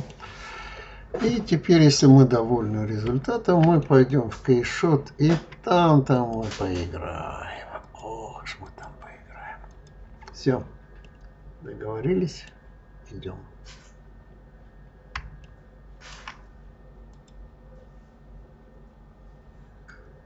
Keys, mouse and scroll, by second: 0.2-1.1 scroll down 2, 1.1-2.0 middle drag, 2.0-2.9 scroll up 6, 2.9-6.0 middle drag, 6.0 click, 7.7 click, 8.5 click, 9.5 click, 10.9-13.9 middle drag, 15.3-18.3 shift+middle drag.